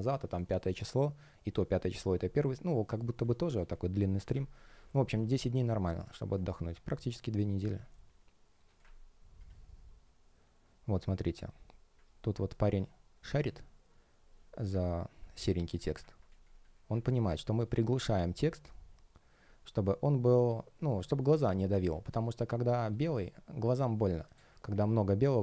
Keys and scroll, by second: 5.0 space, 15.3 space, 16.2 space, 21.3 space.